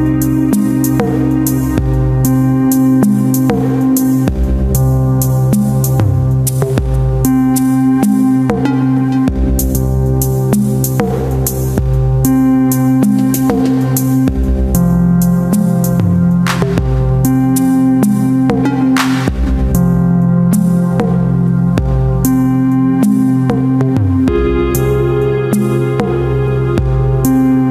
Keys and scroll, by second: 3.9 [, 5.9 s, 10.1 [, 16.3 ctrl+alt+z, 21.1 ctrl+KP_Subtract, 22.5 space, 25.0 space, 25.5 w, 27.5 Return.